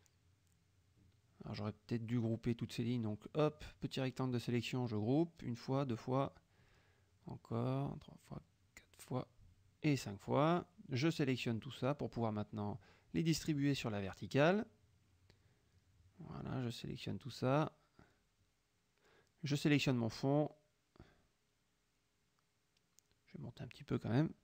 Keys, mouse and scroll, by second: 0.3 ctrl+shift+click, 1.2-2.2 drag, 2.4 middle click, 3.2 middle click, 3.3 click, 3.8-4.6 drag, 5.4 ctrl+g, 5.7-6.7 ctrl+drag, 6.7 ctrl+g, 7.0-8.1 ctrl+drag, 8.1 ctrl+g, 8.5-9.8 ctrl+drag, 9.9 ctrl+g, 10.2-11.4 ctrl+drag, 11.3 ctrl+g, 11.7-12.7 ctrl+drag, 13.6 click, 14.4 click, 15.3 click, 15.9 shift+click, 16.6 shift+click, 17.2 shift+click, 17.7 shift+click, 19.7 shift+click, 22.3 shift+click, 23.0-24.4 ctrl+drag.